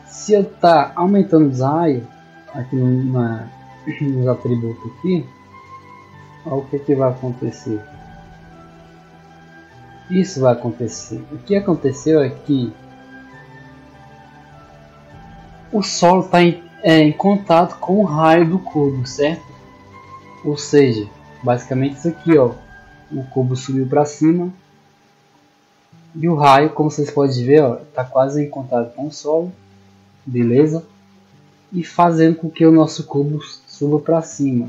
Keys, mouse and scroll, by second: 5.0-6.2 drag, 6.7-7.4 scroll down 1, 7.4 click, 22.2-24.7 drag, 25.6 scroll down 1, 27.5 click, 31.3 scroll down 1.